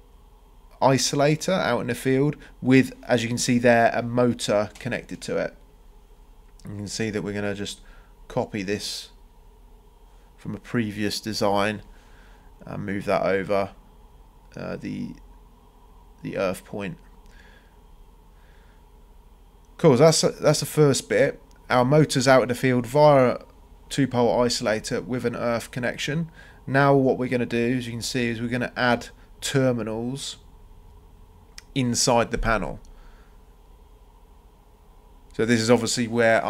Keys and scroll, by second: 9.6 c, 10.1 Return, 17.1 Escape, 24.4 c, 24.9 Return, 34.5 Escape.